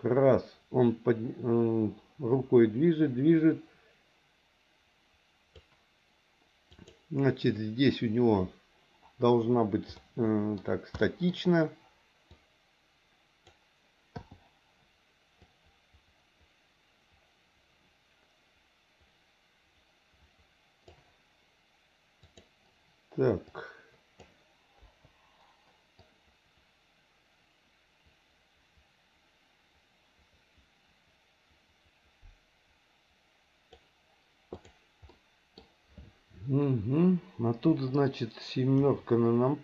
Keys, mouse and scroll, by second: 6.7 click, 10.0 middle click, 11.0 middle click, 12.3 click, 12.7 click, 15.4-21.0 drag, 22.2 click, 23.5 click, 23.6 click, 24.8 Delete, 26.0-33.8 drag, 35.1 middle click, 38.8 KP_7.